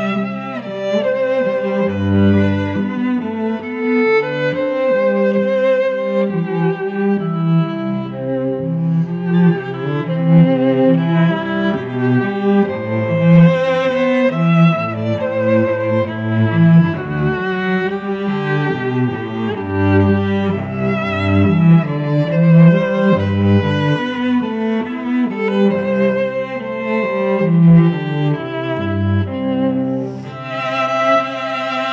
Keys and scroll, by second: 1.5 Return, 6.6 Return, 7.6 v, 8.5 space, 12.5 ctrl+j, 12.9 ctrl+t, 14.8 Return, 17.7 F9, 18.2 ctrl+t, 19.6 Return, 20.0 space, 22.1 shift+Left, 22.3 shift+Down, 22.5 shift+Left, 23.3 shift+Down, 23.8 shift+Right, 24.0 shift+Down.